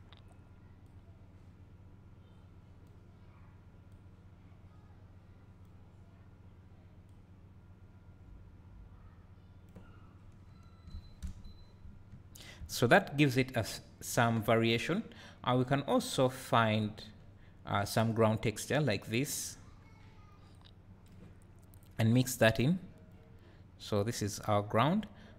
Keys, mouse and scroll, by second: 10.1-10.4 scroll down 2, 10.5-23.2 drag, 11.2 KP_0, 12.1 `, 12.1-12.5 middle drag, 23.8 click.